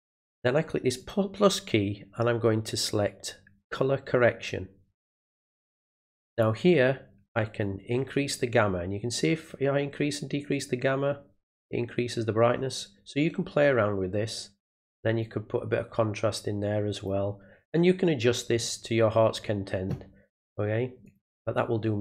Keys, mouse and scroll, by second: 1.0 click, 3.6 click, 5.2 click, 7.6-14.6 drag, 15.2-17.0 drag, 21.0 click.